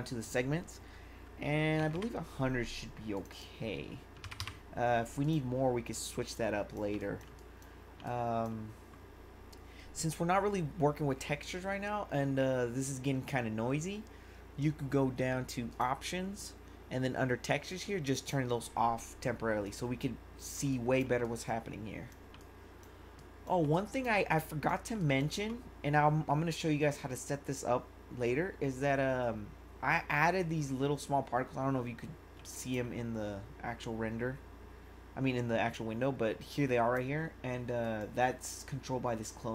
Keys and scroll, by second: 1.8 0, 3.9-4.7 typing, 6.9 1, 20.8 1, 32.5 1.